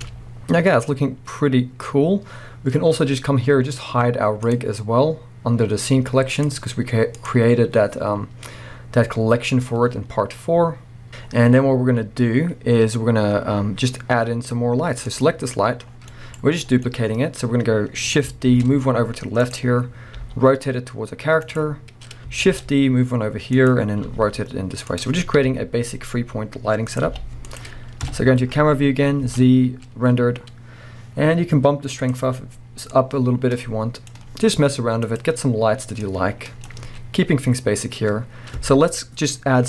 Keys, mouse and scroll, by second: 0.1-0.6 scroll up 1, 4.6 click, 11.1 z, 12.8-13.7 scroll down 1, 15.1 click, 15.6-16.1 scroll down 1, 16.1-19.5 middle drag, 16.4 scroll down 1, 18.5 shift+d, 19.5 click, 19.6-20.1 scroll up 1, 20.1 r, 21.6 click, 22.5 shift+d, 23.7 click, 24.0 r, 25.0 click, 25.4 KP_7, 26.2 r, 27.0 click, 27.1 g, 27.6 click, 28.1 KP_0, 28.6-29.2 scroll up 1, 29.2 z, 30.5 scroll up 1, 32.1-35.2 drag, 37.0-37.5 scroll down 1, 37.5 scroll up 1.